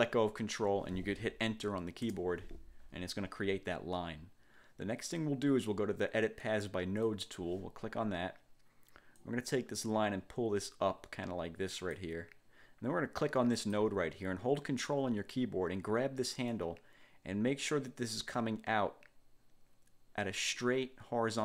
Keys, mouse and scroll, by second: 2.2 Return, 7.2 click, 9.3-12.3 drag, 13.7 click, 16.7-21.4 ctrl+drag.